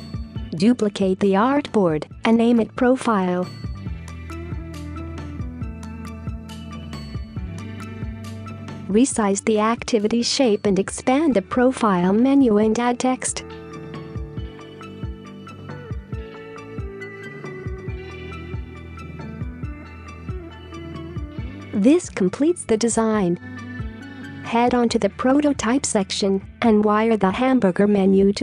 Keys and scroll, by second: 4.5-5.1 typing, 6.3-6.6 typing, 8.1 space, 11.8 typing, 12.0 Return, 14.0 ctrl+z, 19.5-24.2 typing.